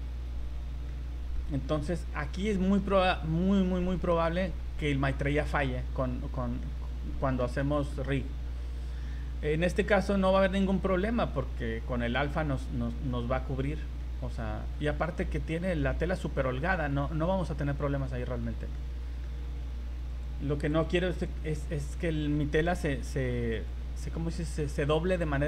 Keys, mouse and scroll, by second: 0.2 scroll up 1, 0.5-0.8 scroll down 3, 0.9 middle click, 1.7-2.1 shift+scroll up 4, 2.2 shift+middle click, 2.5 middle click, 2.9 scroll up 1, 3.8 middle click, 6.8 middle click, 7.6 middle click, 9.5 scroll down 2, 10.2 middle click, 10.7 z, 11.0 middle click, 12.9-13.4 scroll down 5, 13.6 scroll up 3, 14.0 middle click, 15.2 z, 15.5 middle click, 16.4 middle click, 17.4-17.8 scroll up 3, 18.4 z, 18.7 middle click, 20.1 click, 20.7 click, 21.4 click, 23.0 v, 23.6 right click, 24.2 z, 24.5 middle click.